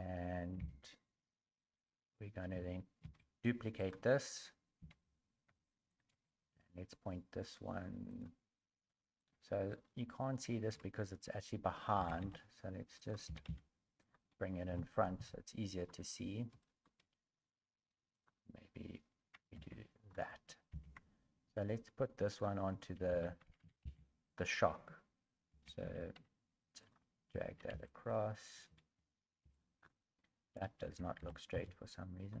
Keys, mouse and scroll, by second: 0.6 g, 9.2 middle click, 9.2 g, 9.8 scroll down 2, 11.9 g, 16.1 scroll up 3, 16.1 g, 16.1 KP_1, 16.1 KP_3, 16.6 shift+middle click, 17.1 scroll up 2, 18.2 click, 19.5 alt+z.